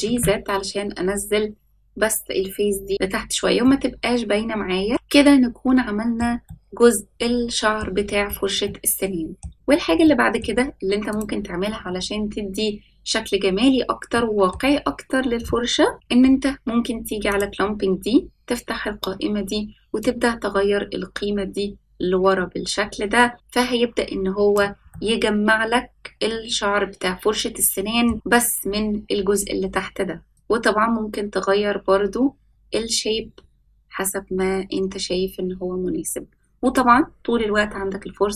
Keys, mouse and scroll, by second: 2.9 click, 3.6-6.1 middle drag, 6.4-7.7 middle drag, 8.0-8.6 scroll down 4, 8.6-9.4 middle drag, 9.5 scroll up 4, 10.0-10.4 shift+middle drag, 11.0 click, 14.1 middle click, 14.8 scroll up 1, 15.9-17.2 scroll down 2, 17.2 click, 20.0-24.5 drag, 24.9-28.0 middle drag, 30.3-36.7 drag.